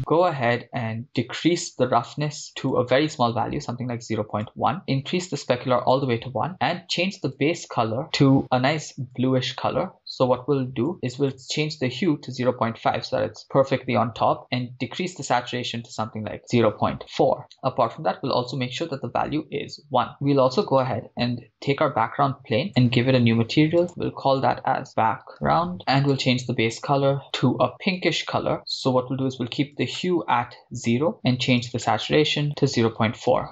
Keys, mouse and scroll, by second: 1.2-2.5 drag, 2.5-4.5 drag, 5.1 click, 7.3 click, 17.4 click, 20.8-25.8 drag, 20.8 right click, 26.0-27.2 drag.